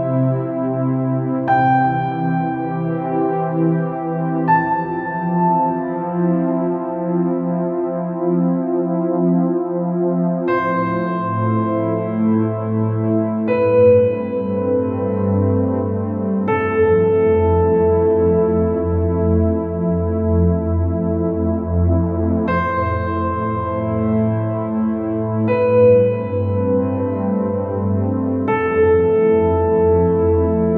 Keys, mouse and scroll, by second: 0.8 b, 1.6 g, 2.4 shift+click, 3.0 click, 3.4 g, 5.1-8.3 drag, 8.9 click, 10.2 KP_1, 10.9 b, 12.1-13.8 drag, 14.1 middle click, 15.2-16.3 drag, 16.5 middle click, 16.9 space, 19.0 space, 19.3 click, 20.3 click, 20.8 KP_1, 21.4 KP_Decimal, 22.4 Tab, 23.2 alt+a, 25.9 ctrl+z, 26.7 a, 28.7 g, 30.3 s.